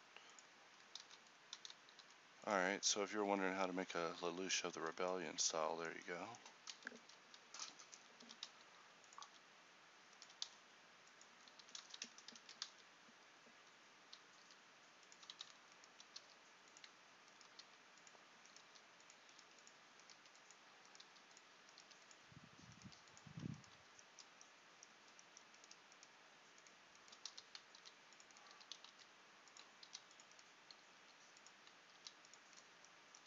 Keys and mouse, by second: 1.1 ctrl+z, 2.1 s, 8.3 e, 9.3 s, 10.3 e, 11.6 s, 14.6 g, 15.4 z, 16.3 g, 17.7-25.0 g, 25.0 z, 27.4 f, 27.8 ctrl+r, 28.6 g, 29.9 ctrl+r, 31.0 g, 32.0 ctrl+r.